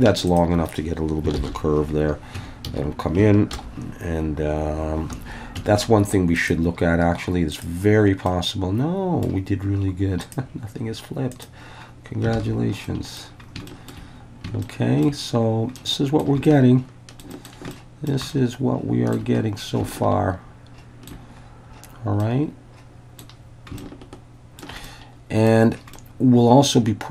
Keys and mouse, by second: 0.3 shift+click, 1.4 ctrl+j, 2.4 Tab, 2.7 a, 3.5 alt+n, 5.6 Tab, 6.5-7.9 drag, 8.3-9.3 middle drag, 10.2-11.7 drag, 12.4 alt+a, 12.9 middle click, 13.7 shift+middle click, 14.7 shift+middle click, 14.8 shift+click, 15.8 middle click, 16.5-17.2 shift+middle drag, 17.3 shift+middle click, 17.7-18.1 shift+middle drag, 18.3-19.2 shift+middle drag, 19.9-21.2 shift+middle drag, 22.2-23.2 middle drag, 23.8-24.6 shift+middle drag, 24.9 middle click, 25.9-27.1 middle drag.